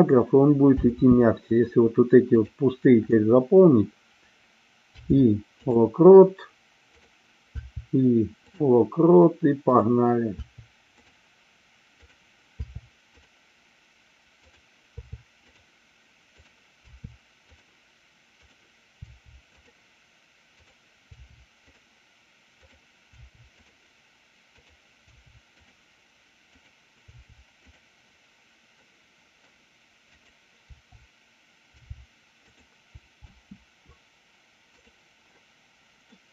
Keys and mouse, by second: 0.9 space, 2.3 click, 7.1 click, 7.6 i, 9.7 click, 10.4 i, 11.9 click, 12.7 i, 14.4 click, 16.9 i, 18.4 click, 19.0 i, 20.5 click, 23.1 i, 24.6 click, 25.1 i, 26.7 click, 29.0 middle click, 30.2 click, 30.7 o, 31.7 i, 33.3 space, 36.2-36.3 middle drag.